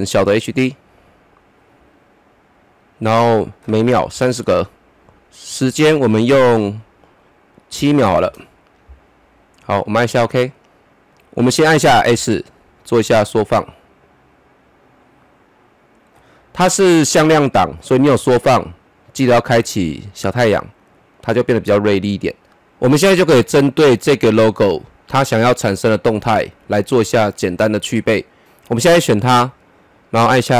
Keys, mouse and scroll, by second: 3.3 click, 4.1 KP_3, 4.2 KP_0, 5.6-7.3 drag, 7.7 KP_7, 8.0 KP_0, 11.1 click, 12.1 s, 13.3 click, 13.3-16.7 drag, 16.6 scroll up 1, 18.9-19.3 scroll up 1, 20.4 click, 22.4 scroll down 1, 29.1 click.